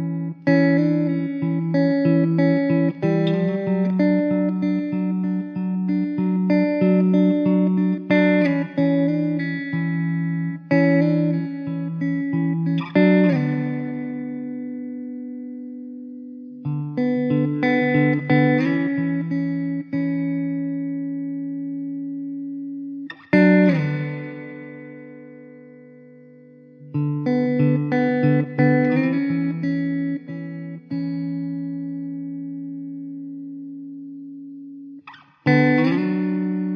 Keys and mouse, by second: 3.0 middle click, 7.3 middle click, 11.8 alt+middle click, 13.4 ctrl+z, 27.5 middle click, 32.6 middle click.